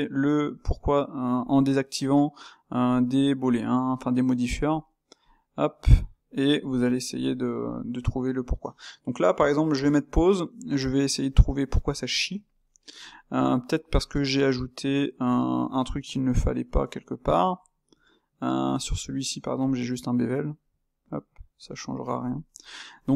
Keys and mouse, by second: 0.9 click, 1.5 click, 2.9 click, 3.5 click, 4.7 click, 5.4 click, 7.1-13.9 shift+middle drag, 13.9-14.4 drag, 14.4-15.5 middle drag, 15.5 Tab, 16.3 s, 17.5 middle click, 18.1 Tab, 21.2 click, 21.7-22.2 drag, 22.2-23.1 ctrl+middle drag.